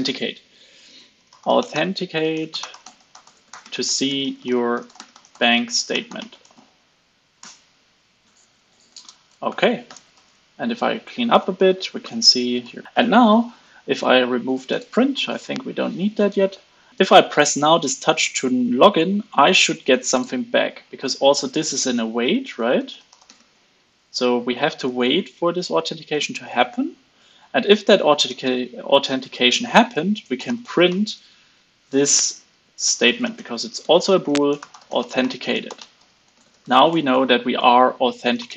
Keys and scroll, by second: 8.4 super+s, 9.8 alt+super+l, 10.1 super+s, 12.3 alt+super+l, 12.5 super+s, 14.8 super+x, 15.1 super+s, 25.1 alt+Right, 25.3 alt+Left, 25.5 alt+Right, 25.7 alt+Right, 32.8 super+Left.